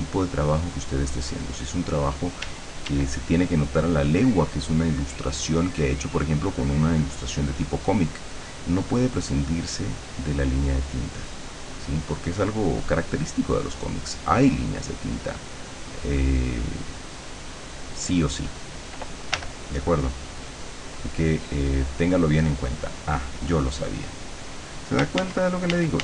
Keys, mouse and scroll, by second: 2.5 d, 3.2-12.9 drag, 13.2 click, 14.7-18.5 drag, 19.4 l, 24.4 click, 25.3 ctrl+z.